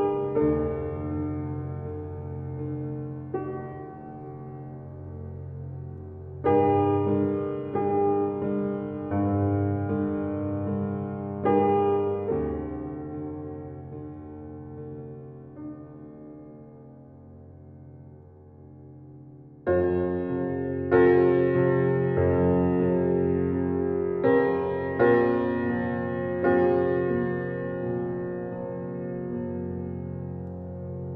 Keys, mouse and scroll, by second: 1.3 b, 1.8-4.9 alt+right drag, 4.9-19.7 drag, 23.4 alt+click, 23.6 alt+click, 25.9-31.1 drag.